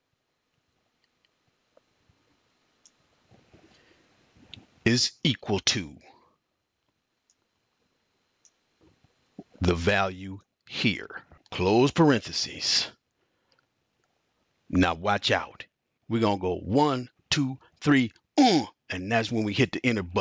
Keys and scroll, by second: 0.0-2.6 typing, 3.8 typing, 5.5 typing, 9.9-11.7 typing.